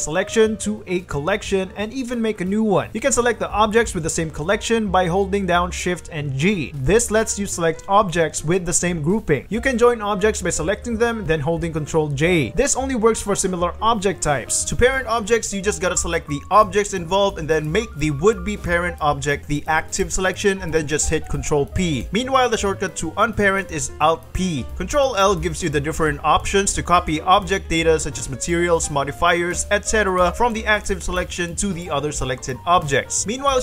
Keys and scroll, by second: 3.0-5.5 typing, 8.7 shift+g, 10.5 alt+Tab, 14.9 Escape, 15.1 w, 22.1 ctrl+p, 22.3 g, 23.3 a, 24.4 alt+p, 24.7 g, 26.1 ctrl+l, 32.1 ctrl+l, 33.3 ctrl+shift+Escape, 33.5 ctrl+shift+l.